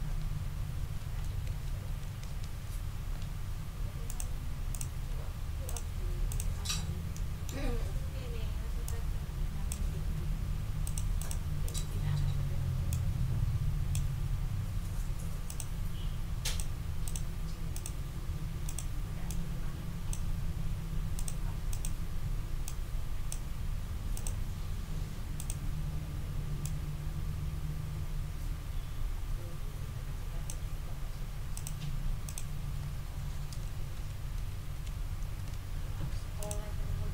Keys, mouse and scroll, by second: 1.5 shift+Down, 4.0 click, 4.7 click, 5.6 click, 6.3 click, 7.1 click, 8.8-9.7 scroll up 2, 9.7 ctrl+scroll up 1, 11.6-11.9 scroll up 2, 12.9-14.1 scroll up 2, 15.5 click, 16.4 click, 17.0 click, 17.7 click, 18.6 click, 19.3-20.3 drag, 21.1 click, 21.7 click, 22.6 click, 24.1 click, 25.3 click, 26.6-30.6 drag, 31.5 click, 32.2 click, 33.9 shift+Up, 35.9 d, 36.4 click.